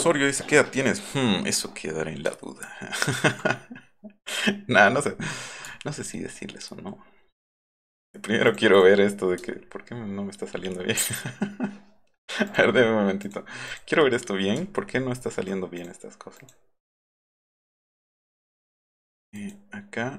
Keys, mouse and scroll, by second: 2.4 alt+scroll up 2, 5.7-6.9 alt+scroll up 4, 7.0-7.5 alt+scroll down 4, 8.5 click, 8.7 click, 9.4-10.4 alt+scroll up 5, 10.6-10.9 alt+scroll down 2, 12.5 click, 13.2 click, 13.7 click, 14.6-15.3 alt+scroll up 3, 15.8 click, 16.4 click, 17.6 right click, 18.4 right click, 19.4 click.